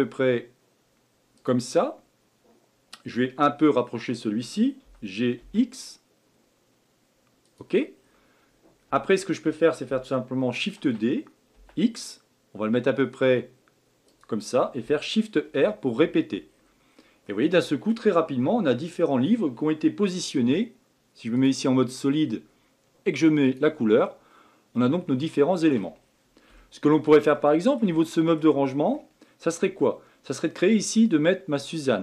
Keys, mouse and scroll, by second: 8.0 scroll down 1, 9.0-10.8 shift+middle drag, 10.8 shift+d, 15.4 shift+r, 15.8 shift+r, 16.5 scroll down 2, 17.2-20.3 middle drag, 20.3 z, 23.4 click, 24.0-26.0 middle drag, 26.0 scroll down 1, 26.6-30.7 shift+middle drag, 30.7-31.5 scroll up 1.